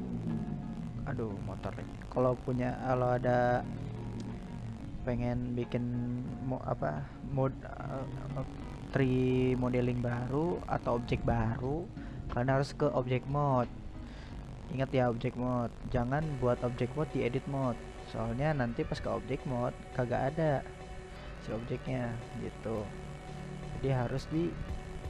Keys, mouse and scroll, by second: 5.9 click, 6.8 click, 7.9-11.5 drag, 11.9-16.6 drag, 16.6 right click, 17.1-17.5 right drag, 18.4-24.6 drag, 24.6 middle click.